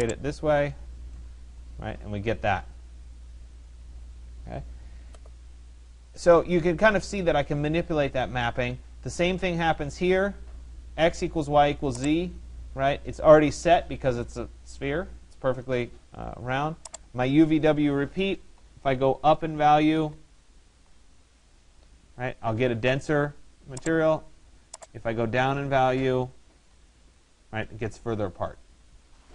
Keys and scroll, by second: 17.8 2, 18.7 Tab, 19.8 2, 20.2 Tab, 20.5 2, 20.8 Tab, 25.9 1, 26.8 Tab.